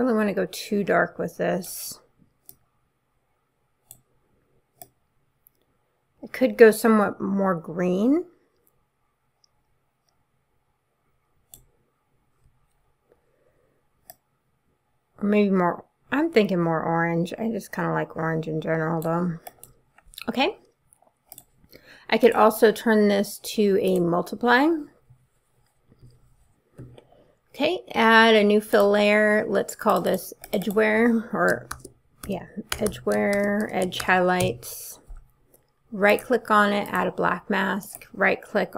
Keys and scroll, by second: 31.5-34.5 typing.